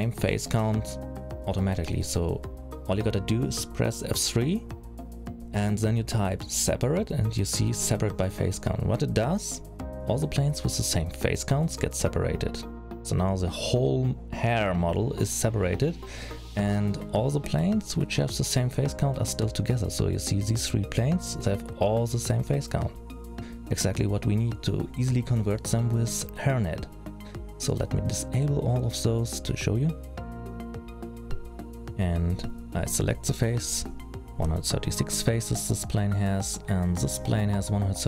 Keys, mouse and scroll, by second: 2.4 alt+a, 3.3 l, 4.8 F3, 13.3 click, 13.9 click, 14.7 click, 15.0-15.9 scroll down 1, 15.9 middle click, 15.9-17.3 scroll down 2, 17.3-18.1 scroll down 7, 18.1 click, 18.7 click, 19.9 middle click, 21.6-22.6 scroll down 3, 24.1-26.3 scroll up 9, 26.3 click, 26.3-27.4 scroll up 2, 27.4-28.3 scroll down 5, 29.0 click, 30.4-31.7 scroll down 3, 31.7 alt+a, 31.7 middle click, 31.8 l, 34.9 alt+a, 36.2 l, 37.1 alt+a, 37.6 middle click.